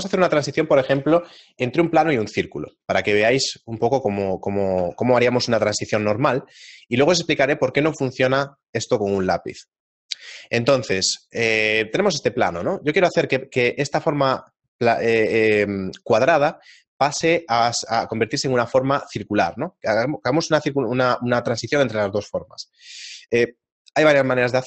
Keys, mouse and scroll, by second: 4.8 Tab, 5.9 middle click, 9.6 shift+middle click, 12.4 g, 14.0 shift+middle click, 15.2 middle click.